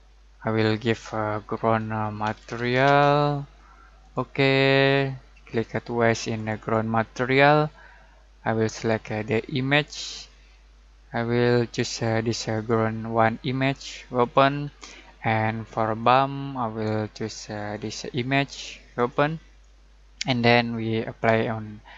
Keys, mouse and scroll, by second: 1.7-3.3 typing, 4.0 click, 6.3 click, 12.5 click.